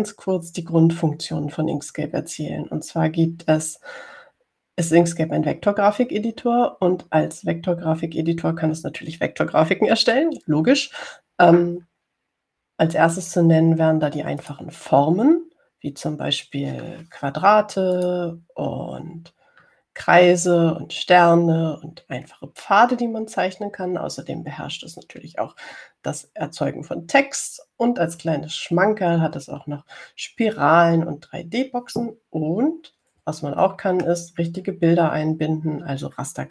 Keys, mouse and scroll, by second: 15.7 click, 19.2 click, 34.9-35.2 ctrl+scroll up 2, 35.8-36.5 ctrl+scroll up 4.